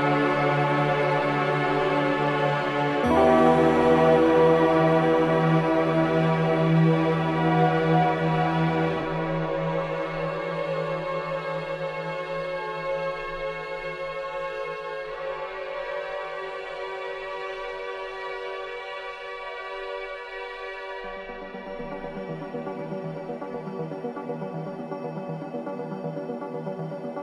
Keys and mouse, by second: 2.0-3.3 drag, 3.9 ctrl+c, 4.8-6.5 drag, 7.0 Tab, 7.8 ctrl+a, 8.2 ctrl+v, 10.1 Tab, 15.5 click, 16.2 click, 17.1 g, 17.5 z, 17.6 z, 23.2 click, 24.6 click.